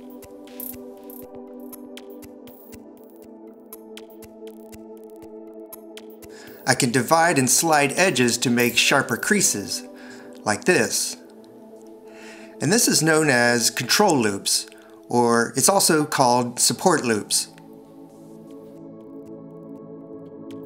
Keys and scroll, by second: 8.8 s, 10.0 alt+r, 10.8 shift+x, 13.4 alt+e.